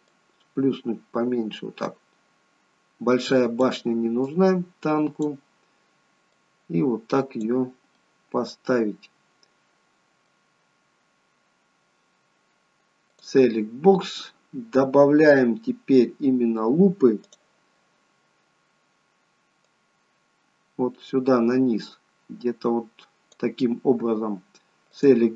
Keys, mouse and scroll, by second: 4.4 click, 6.5 click, 8.0 middle click, 10.7-11.1 scroll up 3, 11.6 scroll down 1, 13.2 click, 17.3 click, 19.7 click, 25.0 click.